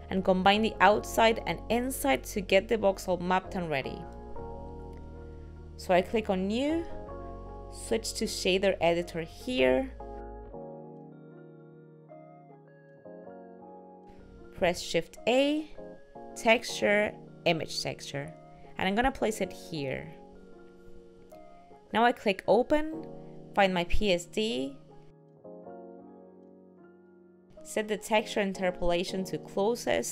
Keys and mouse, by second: 27.9 click.